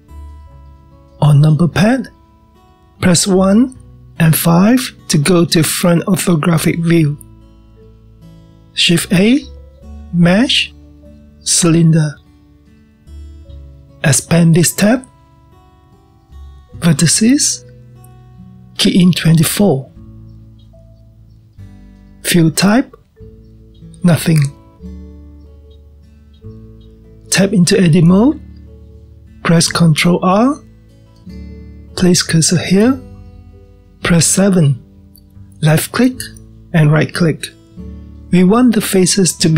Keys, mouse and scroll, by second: 3.5 KP_1, 4.4 KP_5, 6.3-7.3 scroll up 1, 7.3-9.4 scroll up 1, 9.7 shift+a, 14.8-20.8 drag, 23.3-26.4 drag, 28.7-30.0 drag, 30.0 Tab, 30.5-33.3 scroll up 7, 33.3 ctrl+r, 38.7 drag.